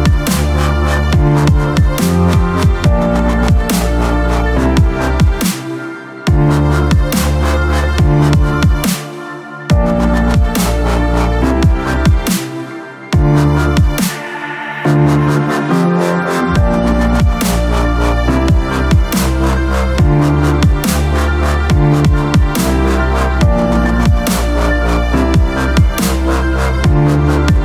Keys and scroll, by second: 5.4 shift+F8, 13.0 ctrl+Return, 25.7 Return, 26.0 Return.